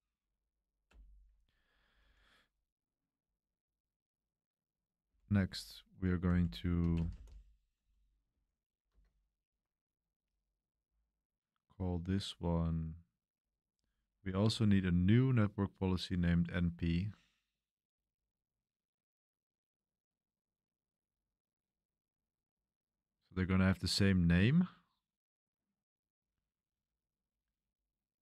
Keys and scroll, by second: 0.9 Return, 2.0 shift+;, 5.0 q, 5.3 Return, 6.3-8.3 typing, 8.9 Tab.